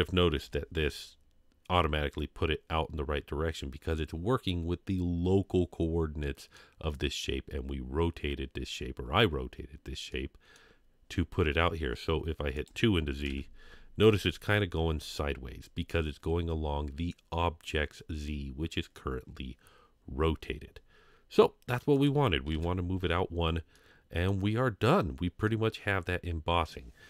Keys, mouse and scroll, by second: 0.4 KP_3, 1.1-1.8 scroll up 2, 6.2-6.6 middle drag, 10.1-10.5 middle drag, 12.6 click, 14.5 KP_3, 22.0 click, 23.7-24.3 middle drag, 25.0-25.5 scroll down 1, 25.5-26.7 middle drag.